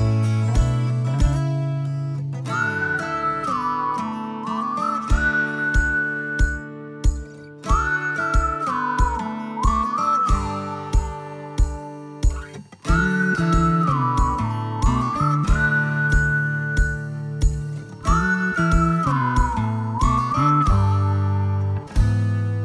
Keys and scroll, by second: 0.1 space, 0.4 Escape, 0.6 Escape, 4.0 s, 6.8 space, 7.6 m, 9.7 space, 10.0 Escape, 10.2 Escape, 16.5 Escape, 16.8 Escape, 20.8 ctrl+s.